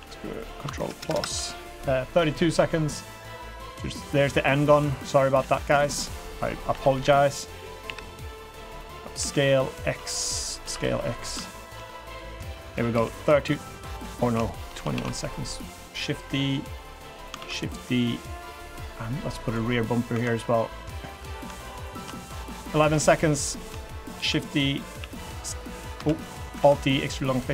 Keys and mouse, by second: 1.0 ctrl+KP_Add, 1.1 ctrl+KP_Add, 2.5 g, 5.5 s, 6.1 click, 6.7 l, 6.9 KP_3, 7.8 KP_1, 9.2 s, 10.6 s, 11.4 shift+click, 12.0 click, 12.9 KP_3, 14.4 shift+middle drag, 14.5 shift+click, 14.9 shift+d, 15.8-16.8 drag, 17.4 shift+d, 18.2-19.5 drag, 19.7 drag, 20.1 3, 20.5 middle click, 23.0 middle click, 23.8 shift+click, 24.1 shift+d, 25.0 s, 26.0 ctrl+z, 26.5 alt+e.